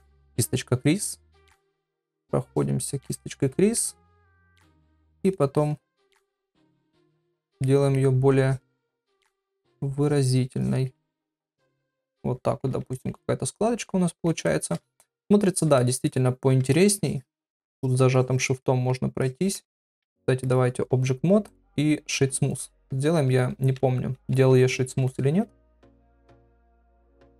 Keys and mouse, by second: 0.0 click, 1.2 ctrl+click, 1.6 ctrl+click, 2.0 ctrl+click, 2.5 ctrl+click, 3.0 ctrl+click, 3.5 middle click, 4.7 click, 5.2 click, 5.5 click, 6.0 middle click, 6.8 click, 7.2 click, 7.6 middle click, 8.5 click, 8.8 click, 9.3 ctrl+click, 9.7 ctrl+click, 10.0 ctrl+click, 10.6 click, 11.0 ctrl+middle click, 11.4 middle click, 11.8 ctrl+middle click, 12.1 middle click, 12.9 shift+middle click, 13.2-14.2 middle drag, 14.5 shift+middle click, 15.0 ctrl+middle click, 15.8 ctrl+middle click, 16.1 middle click, 17.0 shift+click, 17.2 shift+click, 17.6 shift+click, 18.2 shift+click, 18.6 middle click, 19.2 shift+click, 19.4 shift+click, 19.8 ctrl+Tab, 21.5-22.9 right drag, 23.6 ctrl+Tab, 24.3 ctrl+Tab, 26.2 middle click.